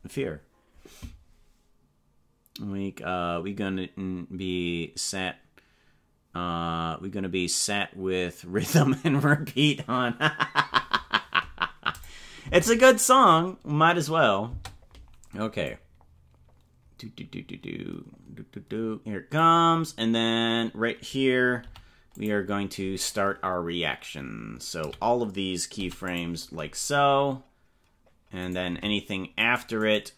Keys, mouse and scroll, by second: 11.9 click, 12.4 space, 14.5 space, 15.6-19.5 drag, 24.9 a, 28.4 right click, 28.6 c, 29.8 right click.